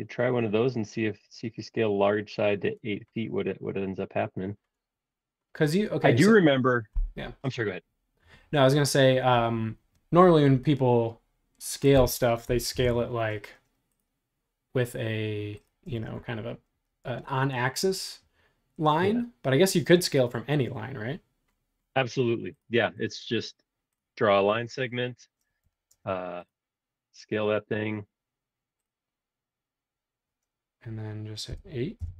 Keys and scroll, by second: 12.7 l, 15.9 space, 25.6 t, 31.4 8, 32.0 '.